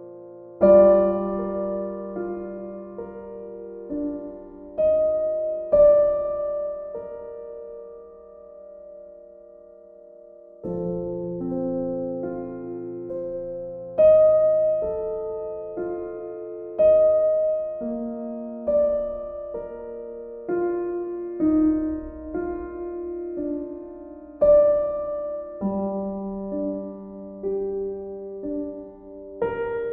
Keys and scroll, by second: 3.7 ctrl+z.